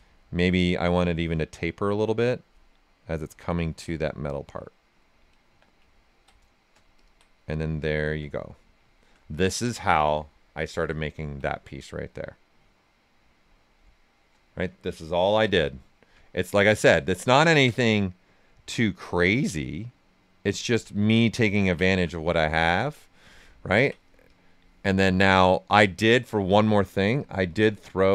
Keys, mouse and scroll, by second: 0.8-2.7 drag, 2.7 right click, 3.8 right click, 5.4 q, 5.9 ctrl+right click, 6.9 ctrl+click, 7.3 right click, 8.3 right click, 8.8 typing, 8.8 alt+right click, 9.2 right click, 10.9 ctrl+right click, 13.6-16.1 right drag, 15.4 w, 16.1 w, 16.4 ctrl+click, 18.1 click, 19.1-20.5 right drag, 20.5 ctrl+click, 20.9 q, 21.3 ctrl+right click, 22.3 right click, 24.2 click, 24.8 right click, 27.1-28.1 drag.